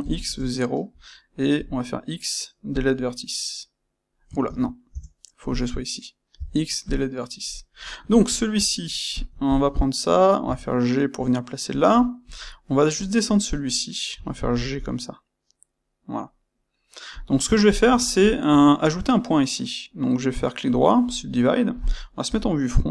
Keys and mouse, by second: 0.2 KP_Enter, 1.5 >, 4.4 ctrl+z, 4.8 Tab, 6.3 >, 7.4 click, 7.6-9.1 middle drag, 9.1 click, 9.4 shift+click, 12.2 click, 12.4-17.1 middle drag, 17.6 shift+click, 18.0-20.0 ctrl+shift+middle drag, 20.0-22.9 right drag, 22.2 KP_1.